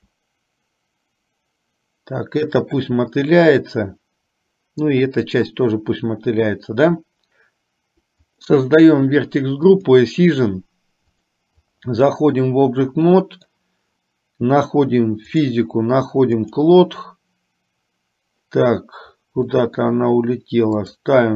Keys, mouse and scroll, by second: 8.2 click, 11.2 click, 13.2 middle click, 15.5 click, 16.5 click, 19.5 middle click, 21.0 click.